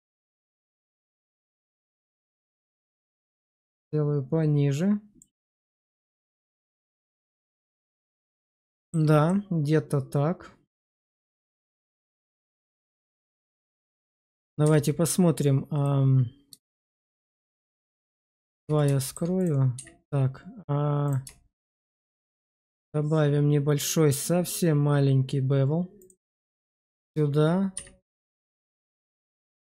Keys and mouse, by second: 0.7 middle click, 1.4 shift+middle click, 1.7 middle click, 3.4 click, 3.6 click, 5.6 shift+middle click, 6.0-7.5 middle drag, 7.7 shift+middle click, 8.6 shift+middle click, 9.1-10.7 middle drag, 10.9 Tab, 11.4 shift+middle click, 11.9 shift+middle click, 12.4 shift+middle click, 13.2 shift+middle drag, 13.7 click, 14.5 q, 15.7 click, 16.5 shift+middle click, 18.5 shift+2, 18.9 shift+click, 19.3 click, 19.6 q, 25.9 shift+click, 26.4 shift+middle drag, 26.9 click, 27.6 q.